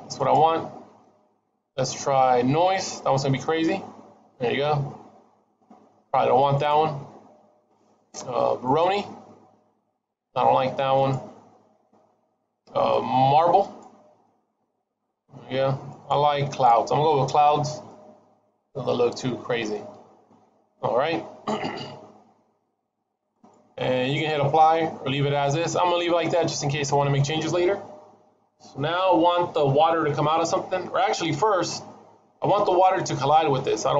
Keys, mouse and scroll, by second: 0.1 click, 4.3 middle click, 6.5 click, 9.1 middle click, 10.8 click, 14.1 middle click, 15.8 click, 17.6 scroll up 1, 17.8 middle click, 23.2 click, 26.7 scroll down 1, 33.7 middle click.